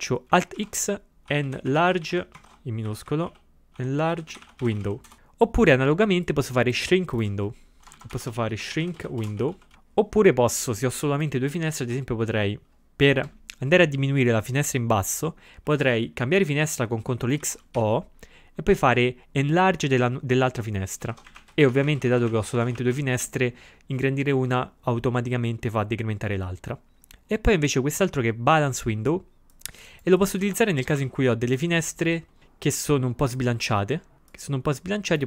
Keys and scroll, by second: 0.6 alt+x, 1.1-2.6 typing, 7.9-10.1 typing, 17.4 ctrl+x, 17.8 o, 21.1 ctrl+x, 21.3 shift+6, 30.5 ctrl+x, 31.0 3.